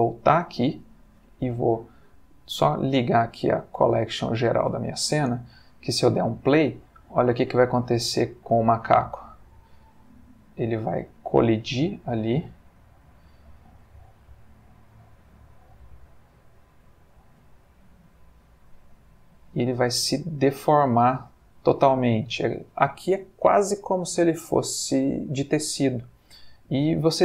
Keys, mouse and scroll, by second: 0.8 click, 1.9 click, 2.7 click, 5.2 space, 10.2-10.8 middle drag, 25.0 space, 26.3-27.2 drag.